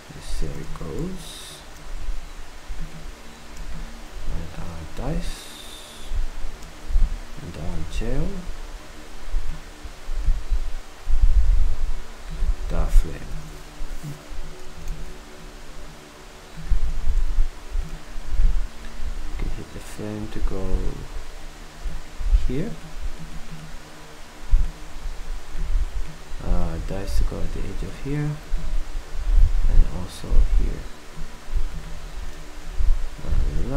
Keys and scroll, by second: 1.0 ctrl+alt+Down, 13.5 ctrl+c, 17.0 v.